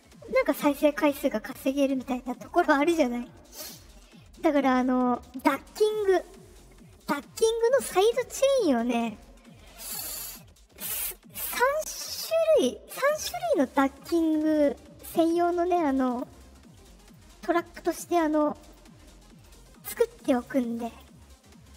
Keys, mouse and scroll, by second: 13.6 right click, 16.0 click, 17.0 right click, 18.5 click, 19.3 right click, 20.3 click, 20.8 click.